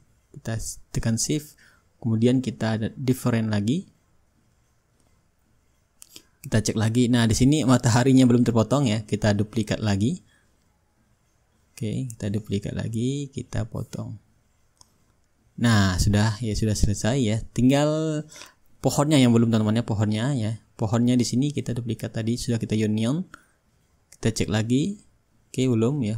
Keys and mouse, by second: 1.2-4.7 shift+drag, 4.9-9.1 drag, 8.8 ctrl+z, 9.4-10.6 middle drag, 12.3-13.4 shift+drag, 14.2-16.0 drag, 17.0 ctrl+z, 17.6-21.0 drag, 18.9-21.0 right drag, 21.1-26.1 shift+drag, 25.9 ctrl+z.